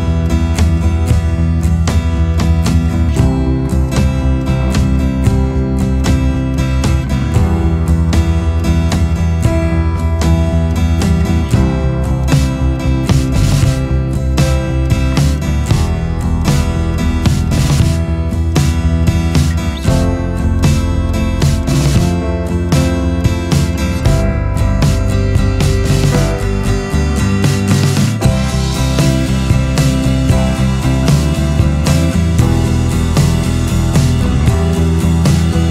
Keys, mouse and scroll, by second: 21.6 ctrl+z, 23.3 ctrl+z, 32.2 ctrl+z, 33.3 b.